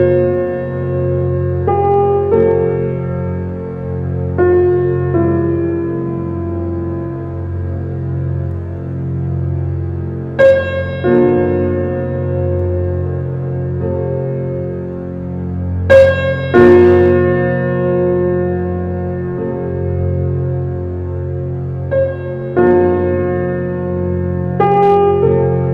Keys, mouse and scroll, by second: 1.2 r, 3.5-4.2 shift+middle drag, 4.2 shift+d, 7.6 r, 10.1 shift+d, 13.1 r, 15.0-16.5 middle drag, 16.5 shift+d, 19.4 alt+middle click, 19.7 alt+middle click, 20.2-22.2 shift+middle drag, 24.2 g.